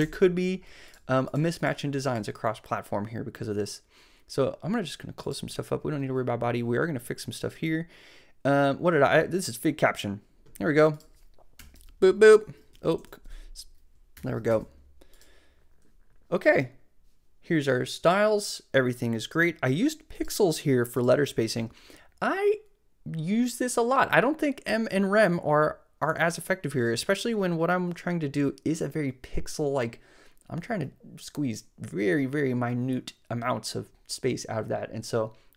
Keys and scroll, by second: 0.0 Left, 11.6 Return, 11.7 super+v, 12.9 super+z, 13.1 shift+super+v, 14.1 shift+super+[, 14.5 super+s.